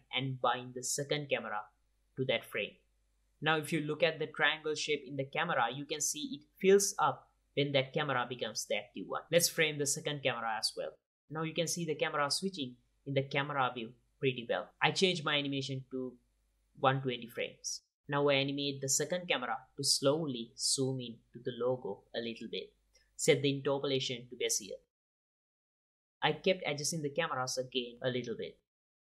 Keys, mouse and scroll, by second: 0.8 ctrl+b, 3.1-4.2 drag, 4.6-6.3 middle drag, 6.3-6.9 drag, 9.5-10.3 middle drag, 10.6 ctrl+alt+KP_0, 10.8 g, 11.8 click, 15.9-17.7 drag, 18.4 click, 18.5 i, 19.5-19.9 drag, 20.2 g, 21.5 g, 22.0 r, 22.6 g, 23.4 i, 24.1 click, 24.7-28.8 typing, 25.1 click, 26.2 click, 27.1 ctrl+s, 27.1 click, 27.4 click, 27.9 click, 28.8 click.